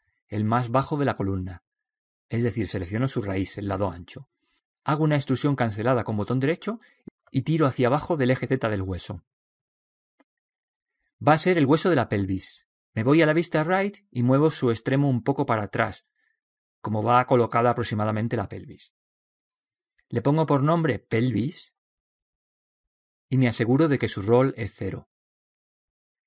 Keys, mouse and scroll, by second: 6.0 e, 8.0 click, 14.4 KP_3, 16.5 click, 19.1 click, 20.6 middle click, 20.8 click, 20.8 right click, 21.7-24.3 drag.